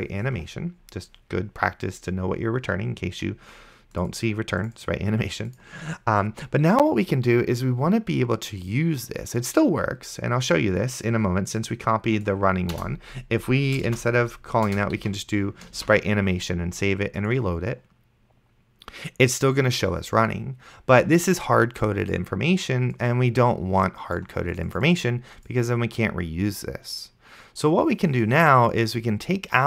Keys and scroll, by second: 13.0 BackSpace, 14.2 shift+-, 14.7 Return, 15.0 ;, 16.1 ctrl+s.